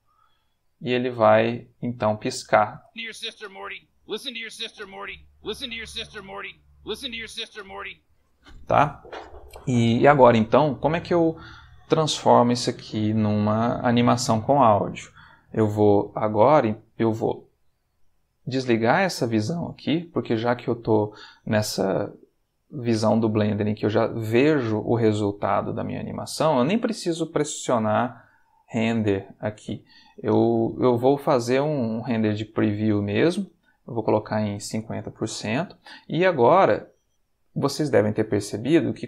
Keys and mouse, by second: 0.8-2.8 drag, 2.8 space, 7.9 Escape, 15.9-17.0 ctrl+middle drag, 18.9 click, 19.7-20.7 shift+middle drag, 28.1 click, 28.6 click, 30.0 Escape, 32.4 shift+middle click, 33.9 click, 34.8-35.7 typing, 38.9 click.